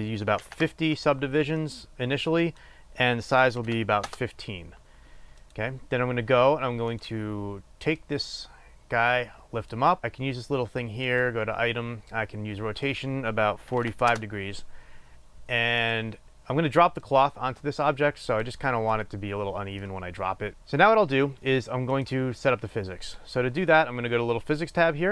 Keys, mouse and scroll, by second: 2.5-5.9 drag, 4.8 Return, 7.0-11.5 drag, 13.0-16.2 drag, 14.2 Return, 17.0-20.5 drag, 20.5-23.3 shift+middle drag, 23.3 click.